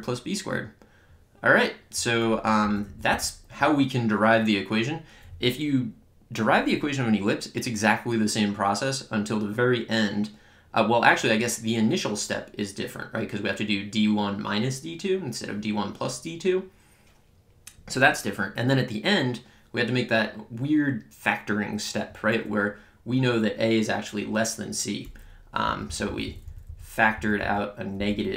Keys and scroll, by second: 2.6 Up.